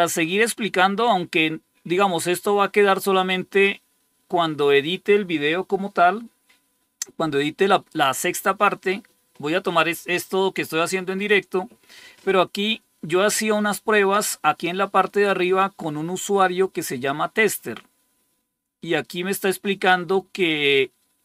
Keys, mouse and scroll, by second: 13.6 scroll up 2, 17.5 click, 19.0 scroll down 2, 19.7 scroll down 2.